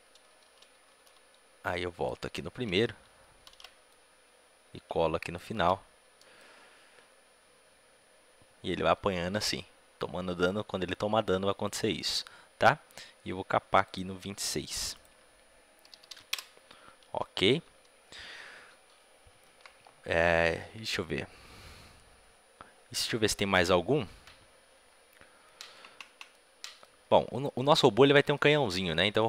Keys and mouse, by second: 1.6 ctrl+c, 5.3 ctrl+v, 13.8-26.3 drag, 26.3-29.2 middle drag.